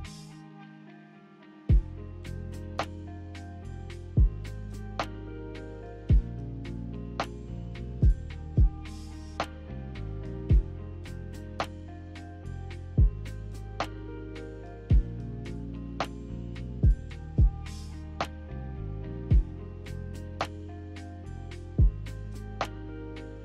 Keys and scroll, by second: 1.8 ctrl+z, 19.6 ctrl+z, 19.8 ctrl+z, 20.2 ctrl+z.